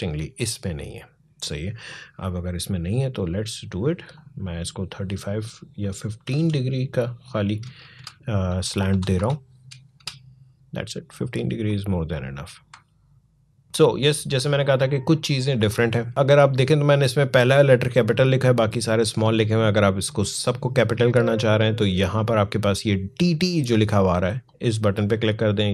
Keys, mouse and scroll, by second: 1.5-6.2 drag, 7.4 BackSpace, 8.7 typing, 9.8 Return, 11.5 click, 12.7 alt+scroll down 1, 13.3 alt+scroll up 1, 13.6-17.5 drag, 24.2 click.